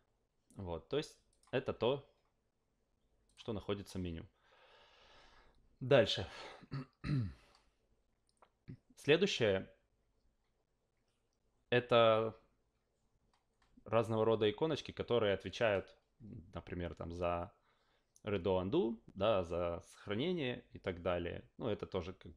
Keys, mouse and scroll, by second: 1.3 click, 3.2 click.